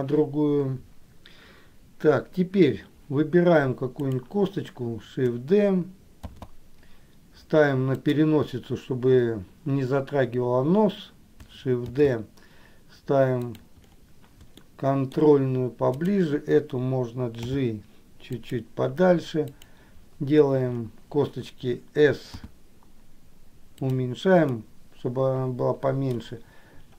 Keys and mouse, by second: 4.2 click, 6.6 shift+d, 12.3 shift+d, 14.9 shift+middle click, 19.7 click, 24.8-26.3 middle drag.